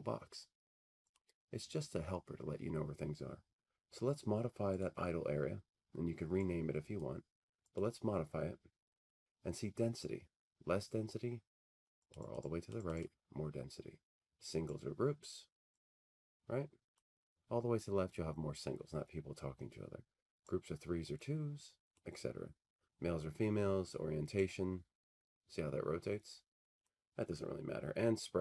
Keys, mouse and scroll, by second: 1.2 click, 5.0 click, 6.3 click, 7.1-9.9 drag, 11.9-15.4 drag, 15.4-19.2 drag, 21.9-24.1 drag, 26.8-28.4 drag.